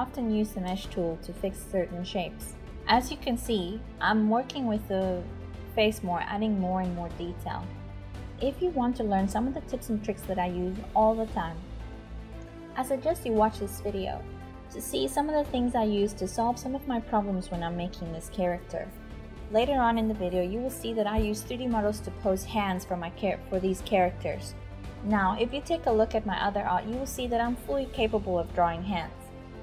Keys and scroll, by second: 0.0-12.5 typing, 14.1-19.6 typing, 20.9-29.6 typing.